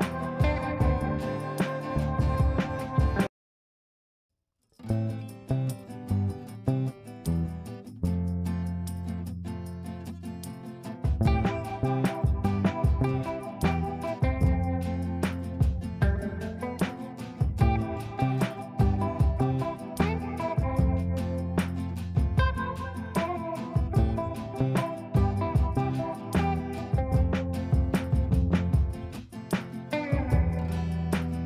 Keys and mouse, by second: 1.9 shift+space, 2.3 shift+n, 3.6 ctrl+space, 4.5 shift+click, 4.7 shift+c, 5.4 click, 5.7 F2, 5.9-6.5 click, 7.5 shift+click, 7.9-8.7 typing, 9.6-10.8 drag, 11.9 shift+c, 12.4 click, 14.0 shift+click, 14.6-16.5 drag, 18.6 ctrl+right click, 19.9 shift+click, 20.8 click, 22.9 ctrl+a, 29.2 typing.